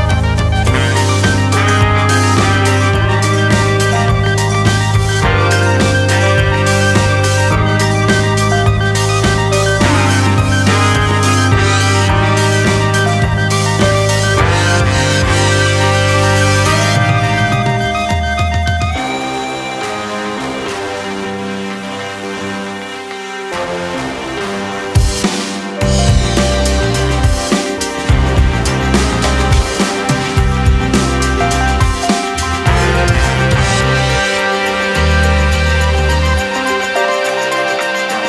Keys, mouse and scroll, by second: 0.0 f, 0.3-1.0 scroll down 2, 1.0 middle click, 1.3 e, 3.8-4.1 scroll up 2, 4.1 shift+middle click, 4.5 scroll up 1, 4.8-6.2 middle drag, 6.2 ctrl+r, 8.7 s, 11.2 g, 13.2 a, 13.4 s, 17.9 s, 20.8 s, 25.2 middle click, 25.5-26.4 scroll up 4, 26.4 shift+middle click, 26.7-27.3 scroll up 2, 27.8 ctrl+r, 29.5 ctrl+r, 31.2-31.7 scroll down 1, 31.7 3, 31.9 click, 32.3-33.3 scroll up 1, 33.3 i, 35.4 g, 37.0 Tab, 37.7 right click.